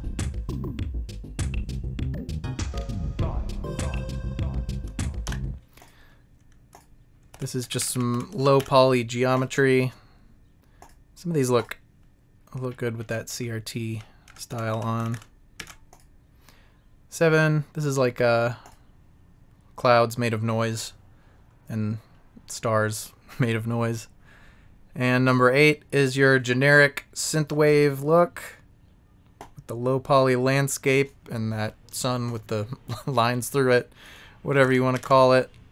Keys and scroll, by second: 7.3 Right, 7.6 Up, 8.1 Right, 13.9 Up, 14.5 Right, 14.7 Down, 15.0 Left, 15.0 Down, 15.1 Right, 15.5 Left, 15.5 Down, 15.7 Right, 34.5 Left, 34.5 Down, 34.6 Right, 35.0 Down, 35.0 Right.